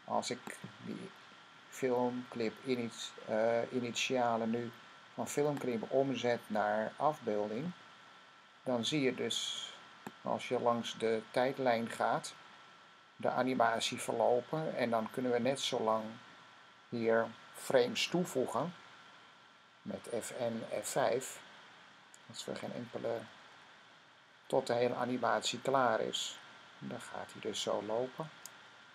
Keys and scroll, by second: 22.6 F5, 23.1 F5, 23.4 F5, 23.6 F5, 23.8 F5, 23.9-25.6 typing, 25.9 F5.